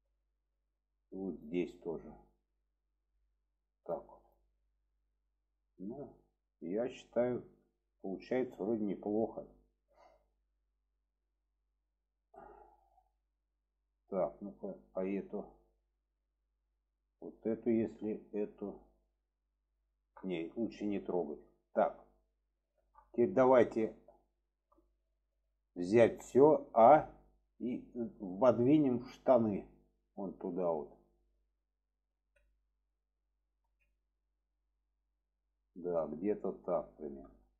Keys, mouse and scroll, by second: 2.4 click, 4.2 click, 4.7-6.8 middle drag, 7.3-7.6 middle drag, 8.4-9.1 middle drag, 9.4 middle click, 10.0-11.1 middle drag, 11.8-12.3 middle drag, 12.8-13.4 middle drag, 14.7-15.8 drag, 15.8-16.6 middle drag, 18.1 shift+click, 20.8-22.0 middle drag, 22.6 shift+middle click, 23.5 shift+middle click, 24.3 shift+middle click, 28.2 shift+middle drag, 29.4 click, 32.1 alt+z, 33.6 alt+z, 34.0-37.5 middle drag.